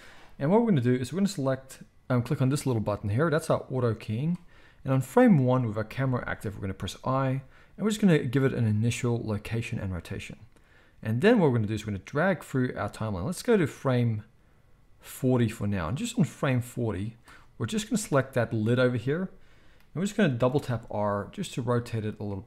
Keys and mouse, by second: 3.4-14.8 right drag, 6.8 i, 11.2-18.0 drag, 11.2-14.8 middle drag, 18.0-22.4 middle drag, 20.5 r.